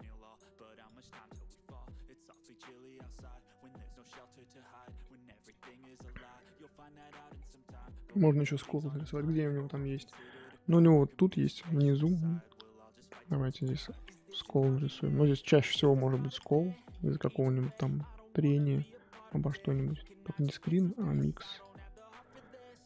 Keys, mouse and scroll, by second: 2.9-4.0 scroll down 5, 4.0-6.5 middle drag, 6.5 scroll up 1, 6.6 middle click, 7.0 scroll down 1, 7.0-7.3 scroll up 2, 7.3-11.6 middle drag, 11.6-11.9 scroll up 2, 11.9 middle click, 12.5-13.6 scroll up 1, 13.6 click, 14.0 middle click, 14.8-15.5 scroll up 1, 15.5 middle click, 16.3 scroll up 1, 17.7 click, 18.5-22.1 drag, 22.1 ctrl+z, 22.7-22.8 drag.